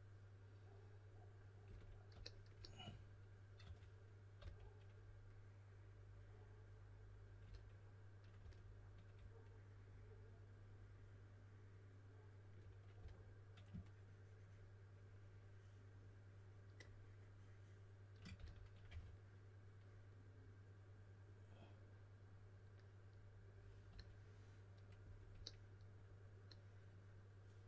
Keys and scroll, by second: 3.5-4.8 typing, 8.3 s, 12.9 s, 18.1-19.3 typing.